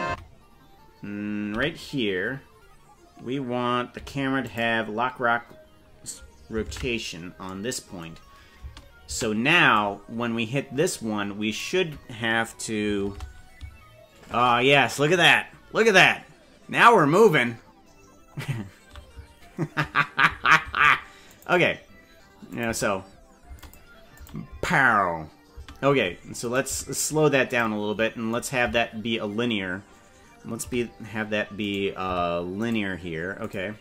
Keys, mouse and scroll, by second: 0.1 Right, 1.5 i, 4.1 i, 6.7 ctrl+Tab, 8.7 space, 9.1 space, 9.7-11.6 drag, 13.1 shift+`, 22.5 click, 22.6 space, 23.5 space, 23.6 click, 24.2 click, 24.5 space, 25.5 space, 26.4 right click, 26.6 g, 28.4 right click, 28.6 g, 32.0 t, 33.4 click.